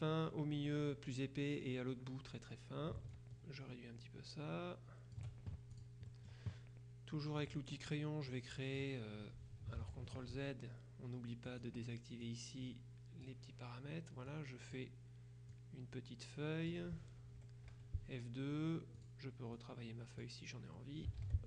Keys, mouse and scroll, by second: 3.2-5.7 ctrl+shift+drag, 5.8 ctrl+shift+click, 7.5 click, 8.4 click, 9.9 ctrl+z, 11.5 click, 12.3-13.8 drag, 14.3 click, 15.6-17.3 drag, 17.5 F1, 19.1-20.8 drag, 21.3 ctrl+z.